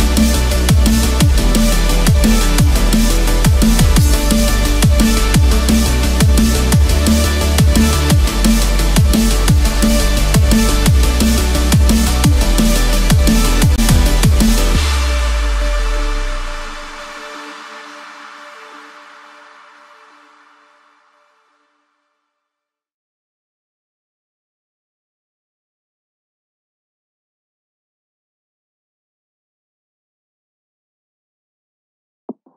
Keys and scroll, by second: 1.9 ctrl+=, 2.5 ctrl+space, 2.8 ctrl+=, 11.8 ctrl+-, 27.2 ctrl+=.